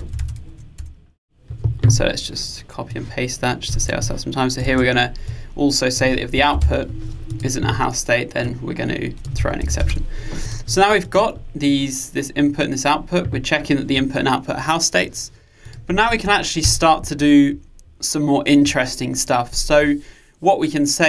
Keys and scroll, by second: 3.8 super+c, 4.7 super+v.